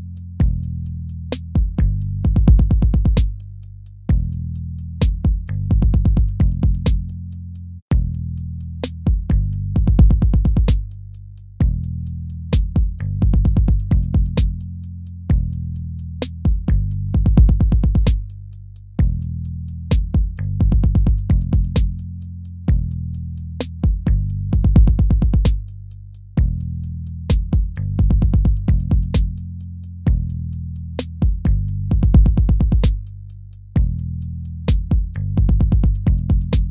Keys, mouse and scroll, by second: 17.9 ctrl+-, 18.7 ctrl+-, 26.4 ctrl+-, 30.3 ctrl+-, 30.5 ctrl+-.